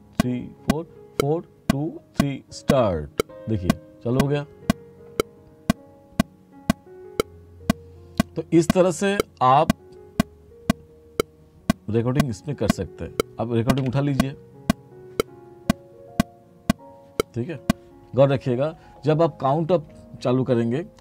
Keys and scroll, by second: 13.9 3.